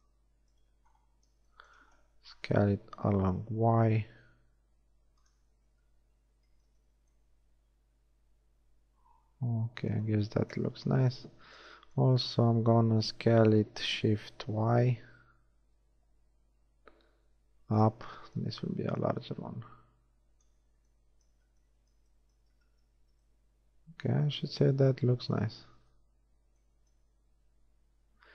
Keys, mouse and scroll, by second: 0.5 z, 3.0 s, 5.7 z, 6.3 z, 6.8 Tab, 10.8 KP_1, 11.3 Tab, 13.5 s, 21.3 z, 22.5 z, 22.9 Tab, 25.5 Tab.